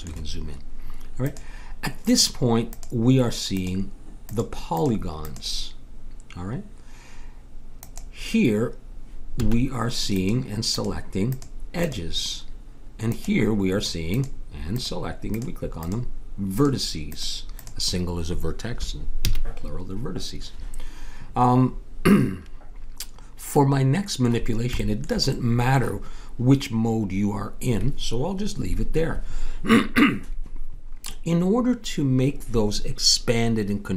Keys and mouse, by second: 1.3 click, 9.4 a, 14.4-19.2 drag, 19.2 a, 23.5 middle click.